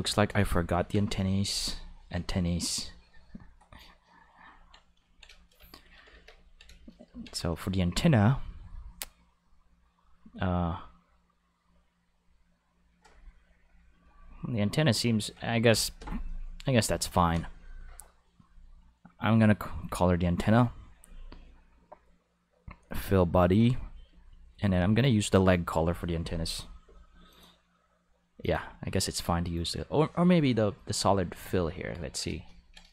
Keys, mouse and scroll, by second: 0.9 Home, 1.8 ctrl+middle click, 2.6 click, 5.1 ctrl+shift+middle click, 6.1 ctrl+s, 14.0 click, 14.9 click, 18.4 click, 24.1 click, 25.0 click, 27.3 click, 28.4 click, 29.5 click, 31.4 click.